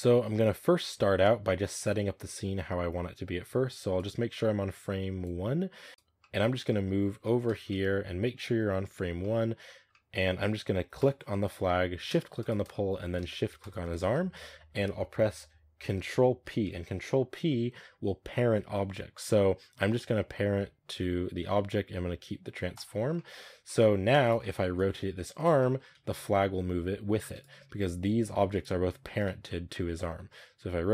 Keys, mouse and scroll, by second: 3.8-5.9 drag, 5.9-6.7 shift+middle drag, 6.7-7.1 scroll up 3, 6.9-10.1 middle drag, 10.1-10.8 scroll up 1, 10.8 right click, 11.2-11.5 middle drag, 11.5-12.2 scroll up 1, 12.2 shift+right click, 12.6-13.5 middle drag, 13.5 shift+right click, 14.0-22.7 middle drag, 23.0-23.4 middle drag, 23.4 scroll down 1, 23.5-24.1 middle drag, 24.1 right click, 24.2 scroll up 1, 24.3 middle click, 24.7 r, 25.5 middle click, 25.7 scroll down 1, 25.8 r, 28.4-29.1 right drag, 29.1 ctrl+z, 29.6 middle click, 29.8 r.